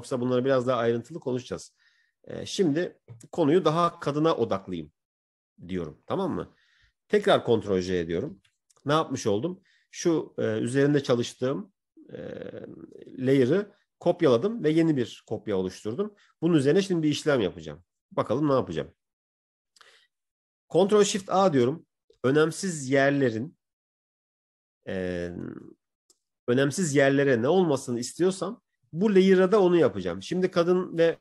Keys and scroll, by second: 8.7 ctrl+j, 21.2 ctrl+shift+a.